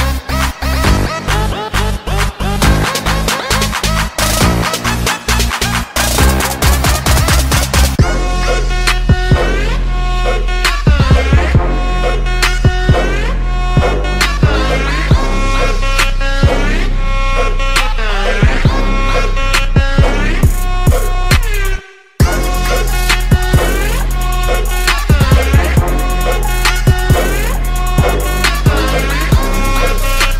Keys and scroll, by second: 0.0 ctrl+z, 1.0 space, 2.2 ctrl+z, 3.0 space, 3.2 ctrl+z, 6.4 ctrl+z, 7.4 space, 9.6 ctrl+z, 11.8 space, 12.3 ctrl+z, 13.9 ctrl+z, 15.1 ctrl+z, 17.3 ctrl+z, 17.8 ctrl+z, 18.5 space, 19.8 ctrl+z, 21.2 ctrl+z, 25.9 ctrl+z, 28.8 ctrl+z, 29.3 space, 29.6 space.